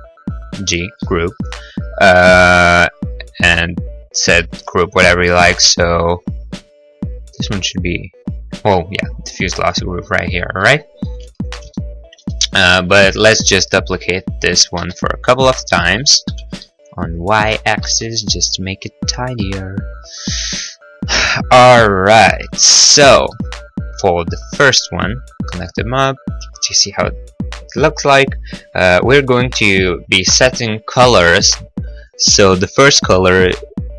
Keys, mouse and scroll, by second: 1.0 g, 9.5 click, 9.6 click, 11.1 click, 11.3 click, 11.6 Delete, 11.8 middle click, 12.0 middle click, 12.3 click, 12.5 click, 14.9 shift+d, 16.3 y, 17.5 click, 17.7 shift+d, 17.8 y, 19.6 click, 19.8 click, 20.3 right click, 20.4 g, 20.8 click, 20.9 click, 22.3 g, 23.0 click, 23.5 middle click, 23.6 middle click, 23.6-24.3 scroll, 24.8 click, 25.6 click, 32.2 click, 33.1 click.